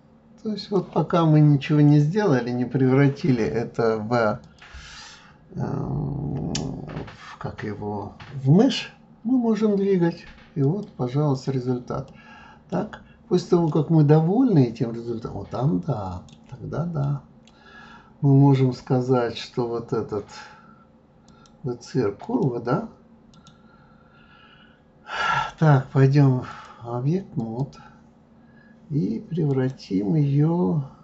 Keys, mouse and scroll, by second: 4.4 click, 10.6 click, 11.3 click, 12.1-16.7 middle drag, 16.9 scroll up 1, 17.0-20.0 middle drag, 21.3 click, 22.2 click, 23.3 right click, 26.5-29.6 drag.